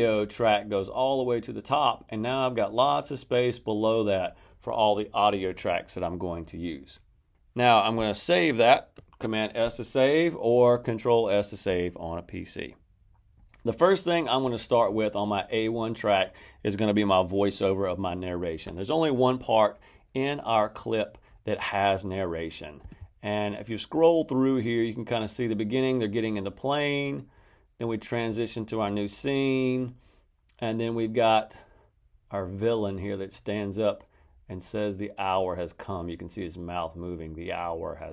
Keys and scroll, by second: 8.9 super+s.